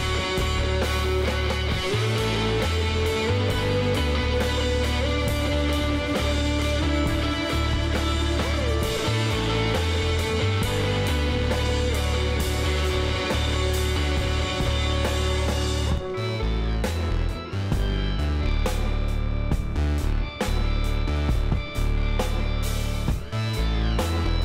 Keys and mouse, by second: 0.4-2.2 drag, 1.8 z, 3.6 s, 6.9 click, 8.6 s, 10.9 z, 11.6 click, 12.1 middle click, 13.1 s, 16.0-20.7 middle drag, 17.6 s, 20.7 KP_1, 21.7 middle click, 22.6 middle click, 22.9 middle click, 23.1 Tab, 23.6 middle click, 24.1 a, 24.2-24.4 middle drag.